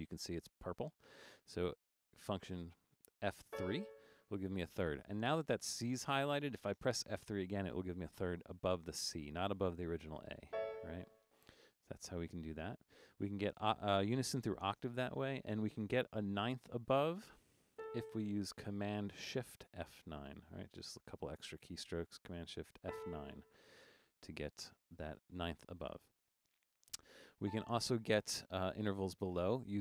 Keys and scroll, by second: 3.4 F3, 10.6 F3, 17.8 a, 22.8 shift+super+F9, 25.4 Up, 25.6 Up, 25.7 Up, 25.9 Up, 26.1 Up, 26.3 Up, 27.4 a.